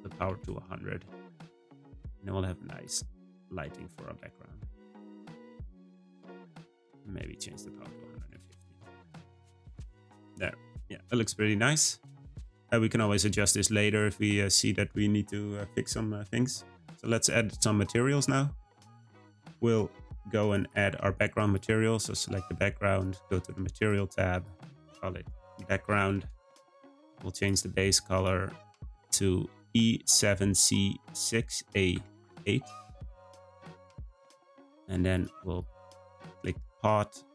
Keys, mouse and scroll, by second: 0.2 0, 1.3 g, 3.6-4.0 scroll up 1, 4.1 g, 5.6 s, 7.4-9.8 drag, 10.1 scroll up 1, 10.7-13.7 scroll up 1, 17.1 click, 21.4 click, 23.0 click, 23.7-27.4 drag, 36.3 click, 37.1-37.3 drag.